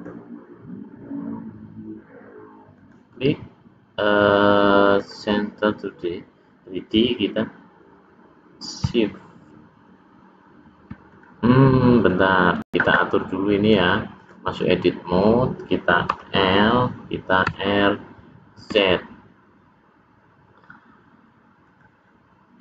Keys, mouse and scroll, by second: 2.8 right click, 11.1 click, 11.9 click, 13.5 click, 16.1 l, 17.4 r.